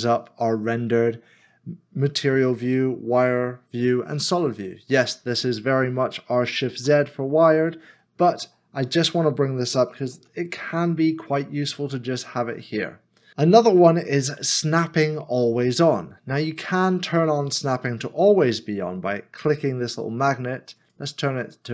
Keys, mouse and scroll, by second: 6.8 shift+z, 7.7 shift+z, 10.0 z, 17.3 scroll up 1.